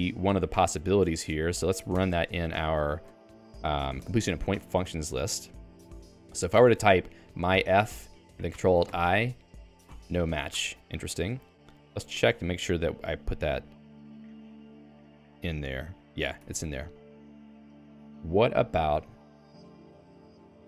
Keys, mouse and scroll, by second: 0.5 alt+/, 1.9 ctrl+alt+x, 3.0 ctrl+alt+x, 4.0 Escape, 4.2-8.0 typing, 8.9 ctrl+alt+i, 9.9 ctrl+alt+i, 11.3 BackSpace, 11.9 BackSpace, 12.1 Escape, 13.9 click, 14.0 Escape, 16.6 ctrl+g, 16.8-20.4 typing, 18.9 alt+x.